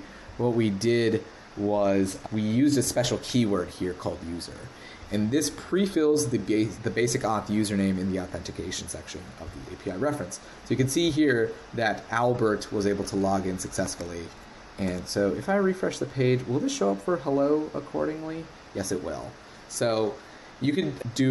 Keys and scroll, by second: 13.8 super+`, 14.8 super+r.